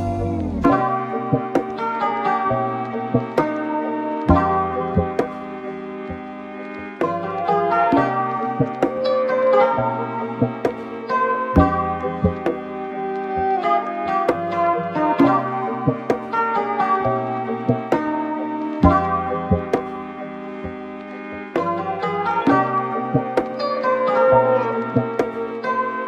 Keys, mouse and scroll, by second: 18.6 space.